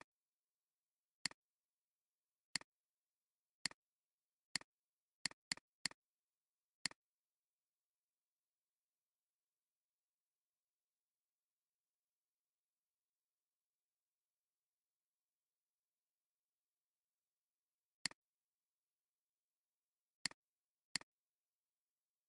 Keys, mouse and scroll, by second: 1.7 alt+scroll down 1, 5.5 double click, 5.7 space, 5.9 double click, 16.7 ctrl+d, 17.3 ctrl+d, 19.8 alt+scroll down 1, 20.1 space.